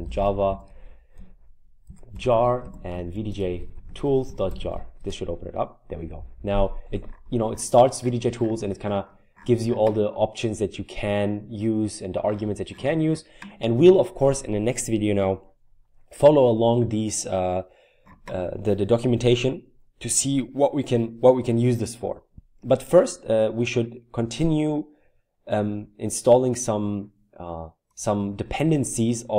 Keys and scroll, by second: 0.0-5.1 typing.